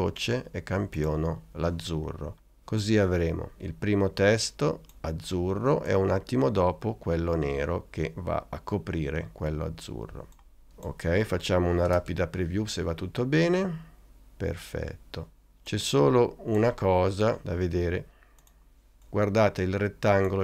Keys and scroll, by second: 12.0 space.